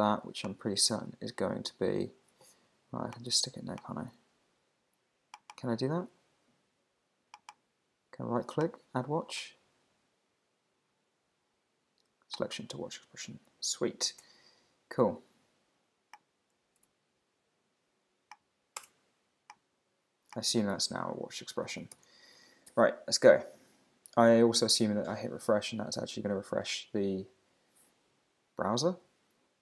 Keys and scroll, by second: 1.0 alt+shift+Left, 14.2 Return, 16.8 Return, 22.0 super+r.